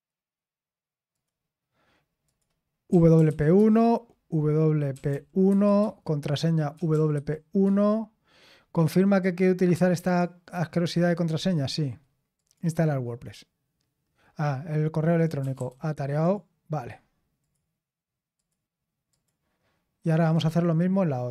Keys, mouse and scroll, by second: 1.1 click, 2.2 click, 2.9-3.7 typing, 4.9-5.4 typing, 5.8 Tab, 6.6-7.6 typing, 10.0 click, 10.5-12.3 scroll down 1, 12.3 click, 12.3 typing, 15.2 click, 15.4-17.1 typing, 16.2 click, 17.4 click, 18.3 click, 19.1 click, 20.5 click.